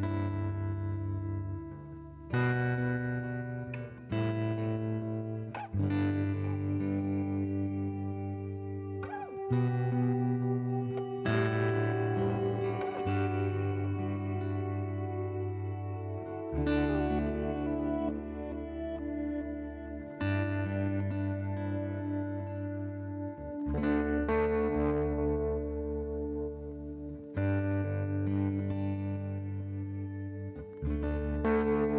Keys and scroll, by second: 6.0 0, 6.1 Return, 8.0 -, 8.3 1, 8.5 Return, 13.4 c, 15.7 shift+f, 27.1 m.